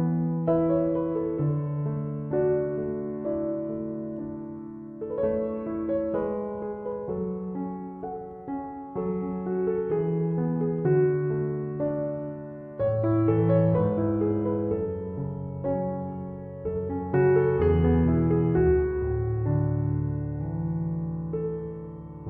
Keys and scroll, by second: 6.5 ctrl+=, 8.7 ctrl+-, 11.2 ctrl+z, 13.1 ctrl+=.